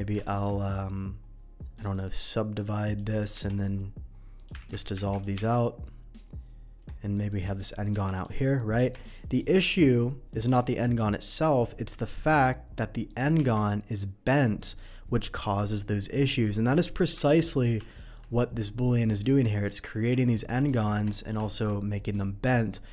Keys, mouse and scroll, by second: 0.2 middle click, 0.6 right click, 1.9 shift+right click, 2.8 shift+click, 4.3 click, 4.5 ctrl+x, 4.8 click, 4.9 ctrl+x, 5.0 ctrl+x, 5.1 click, 5.3 Tab, 7.1 middle click, 8.1 click, 9.3 click, 9.6 middle click, 11.2 g, 13.0 click, 13.3 Tab, 13.9 middle click, 16.4 middle drag, 17.1 Delete, 17.4 click, 17.9 shift+middle drag, 18.3 shift+middle click, 18.5 shift+middle drag, 19.1 shift+middle click, 19.6 Tab, 20.4 middle click, 21.4 shift+Tab, 21.4 middle click.